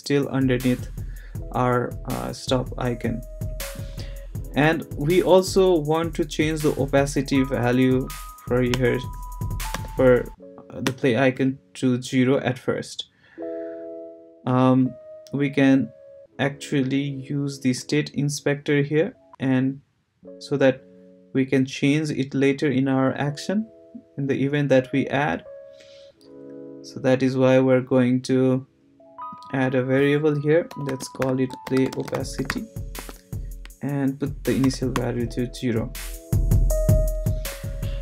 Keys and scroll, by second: 8.7 Return, 9.7 0, 10.8 Return, 30.4-33.0 typing, 34.6 0, 34.9 Return.